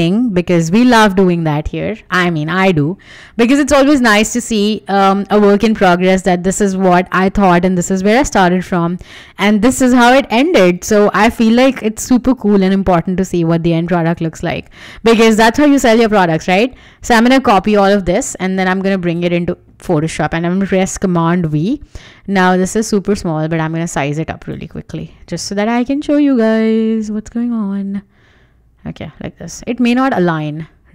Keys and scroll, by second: 17.4 super+c, 18.2 super+Tab, 20.1 super+v.